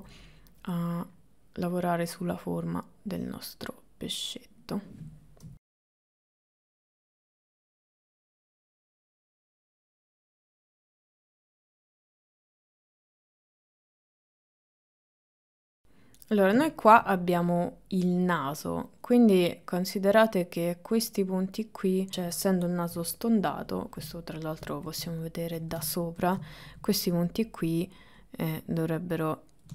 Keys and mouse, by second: 0.9-2.4 drag, 3.3-4.7 drag, 5.5 KP_1, 6.4 KP_3, 7.0 click, 7.4 shift+middle click, 7.7 click, 8.3 middle click, 8.4 KP_1, 9.0 KP_3, 9.4 middle click, 10.1 click, 10.6 shift+middle click, 11.0 click, 11.7 click, 12.2 click, 13.1 shift+middle click, 13.5 click, 14.0 click, 15.1 click, 15.4-16.4 drag, 16.8 shift+middle click, 18.2 click, 19.1 middle click, 22.9 KP_7, 24.6 middle click, 25.3 middle click, 26.0 shift+middle click, 27.1 click, 28.3-29.7 drag.